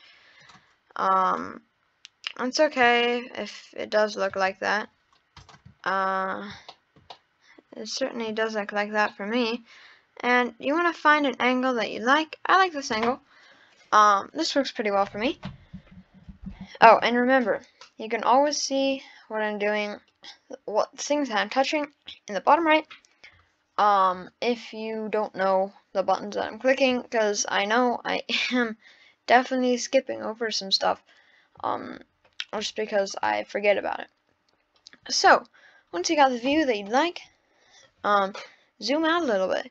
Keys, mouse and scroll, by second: 0.5 click, 1.3 click, 2.8 click, 4.7-5.4 scroll down 6, 5.4 click, 5.9-6.7 scroll down 2, 6.7-8.4 shift+middle drag, 8.4-9.1 scroll up 2, 9.1-11.9 middle drag, 11.9-15.0 scroll down 4, 19.8 scroll up 1, 36.3-37.3 scroll up 1, 37.3-38.6 scroll down 1, 38.6-39.5 scroll down 1, 39.5-39.7 scroll up 1.